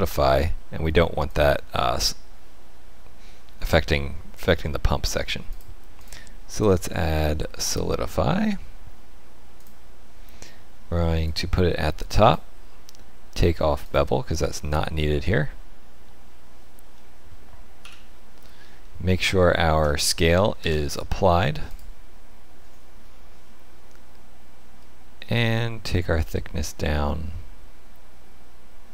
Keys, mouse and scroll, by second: 1.2 click, 5.4 click, 11.2 click, 13.8 click, 16.9 middle click, 17.8 KP_1, 18.8 shift+middle click, 20.5 ctrl+a, 25.3 shift+click.